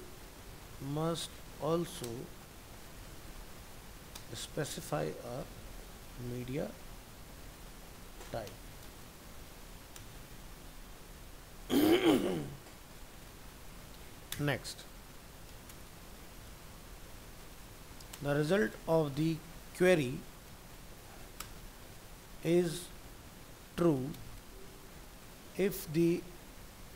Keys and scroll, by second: 10.4 ctrl+s.